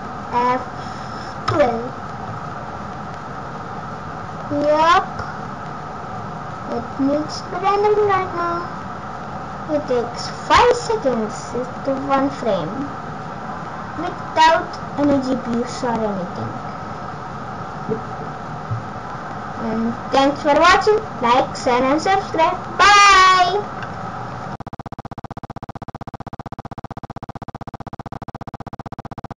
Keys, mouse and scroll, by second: 1.5 ctrl+F12.